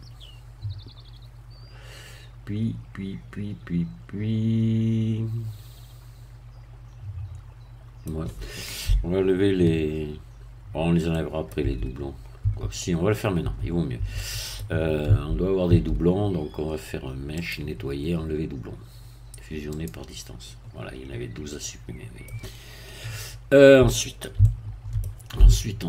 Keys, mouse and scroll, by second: 11.1 middle click, 11.6 Tab, 12.4 Tab, 12.8 middle click, 13.4 Tab, 14.2 middle click, 15.0 a, 17.4 click, 19.7 click, 21.6-22.8 middle drag, 24.4 shift+middle click, 25.4 shift+scroll up 2.